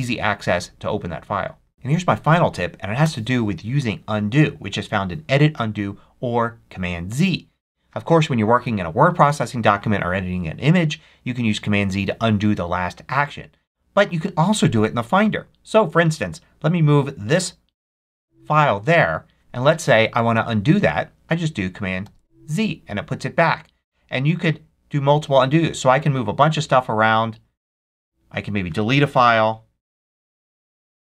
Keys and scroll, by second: 21.9 super+z, 29.0 super+BackSpace.